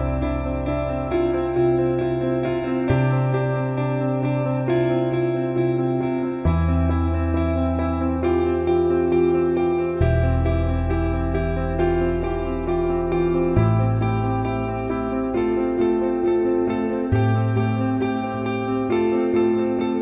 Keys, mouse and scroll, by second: 0.1 click, 1.5 click, 2.1 ctrl+z, 3.9 click, 4.9-6.2 drag, 6.3-7.1 alt+middle drag, 7.7 click, 9.3 click, 10.1-13.3 drag, 15.9 alt+middle click, 16.8-18.1 drag, 18.3 alt+middle drag, 19.4 click.